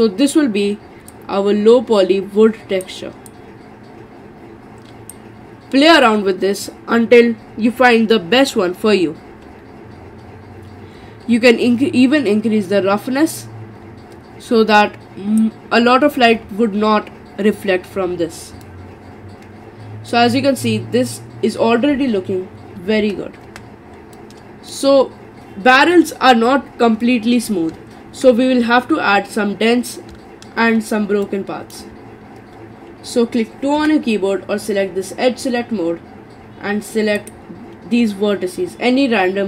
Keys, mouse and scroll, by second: 9.2 scroll down 3, 11.5-14.5 drag, 18.6-23.0 middle drag, 23.0 Tab, 23.4 Tab, 24.2-27.3 middle drag, 28.4-30.5 scroll up 4, 30.5-31.3 scroll up 3, 31.3-33.8 shift+middle drag, 33.8 2, 37.2 click.